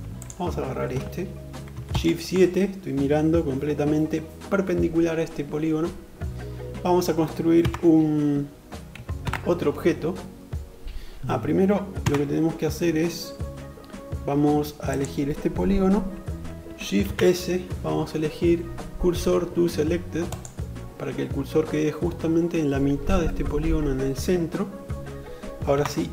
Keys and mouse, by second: 1.6 shift+KP_7, 5.2-7.2 middle drag, 7.2 Tab, 8.7 shift+a, 11.6 Tab, 14.4 click, 16.7 shift+s, 25.3 Tab.